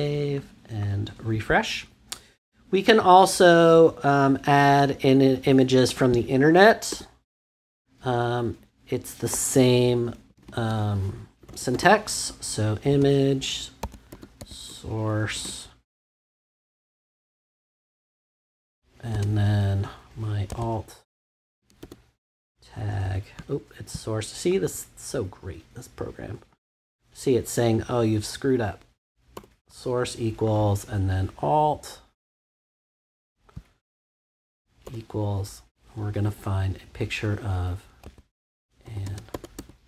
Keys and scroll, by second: 6.9 Return, 10.3 shift+,, 11.4-15.3 typing, 17.0 shift+', 18.5 Right, 19.1 space, 20.5-22.3 typing, 29.3 =, 33.2 BackSpace, 34.8 =, 38.0-39.8 typing.